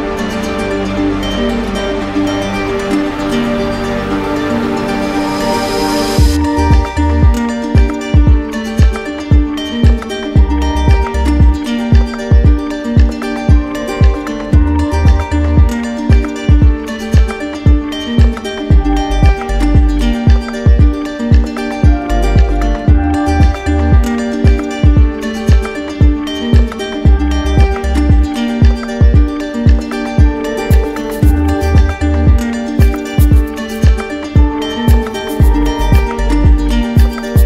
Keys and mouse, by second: 8.2-9.4 drag, 12.1-13.2 right drag, 12.8 z, 14.4 z, 15.2 click, 16.0 right click, 17.1 z, 17.7 click, 19.9 right click, 23.0-24.0 drag, 26.2-27.3 drag, 28.4 z, 29.3 click, 31.1 right click, 31.9 ctrl+d, 32.8 ctrl+d, 33.4 ctrl+d, 36.2 right click, 37.1 right click.